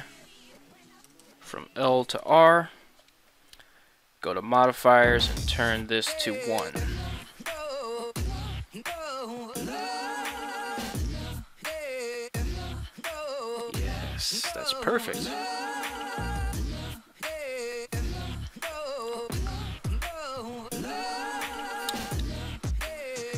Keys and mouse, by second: 9.7 right click, 10.3 ctrl+Tab, 12.0 r, 18.4 right click.